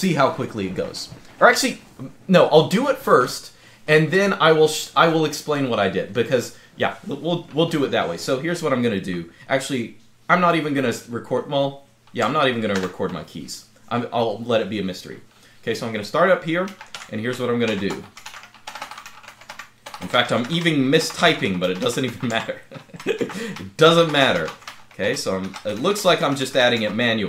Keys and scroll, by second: 12.5 super+Scroll_Lock.